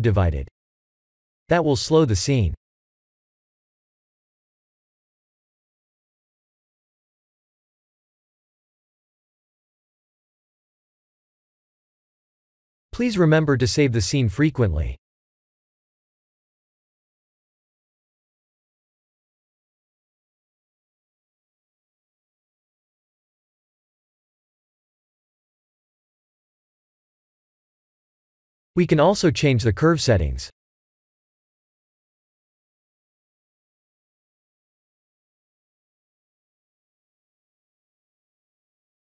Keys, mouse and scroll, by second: 0.4 scroll up 3, 0.9-3.2 middle drag, 3.5-4.1 scroll down 4, 5.1 s, 6.5 click, 7.7 s, 14.7 click, 14.8 middle click, 15.8 click, 16.3-17.5 scroll down 5, 19.1 ctrl+z, 20.8 ctrl+z, 21.7-22.0 scroll up 3, 22.0 scroll down 1, 22.2-22.9 scroll up 5, 23.2-23.8 shift+middle drag, 24.1-25.9 middle drag, 26.2-26.7 scroll down 2, 26.9 scroll down 2, 27.5-27.9 middle drag, 29.0 click, 30.7-32.4 drag, 34.8-38.3 drag.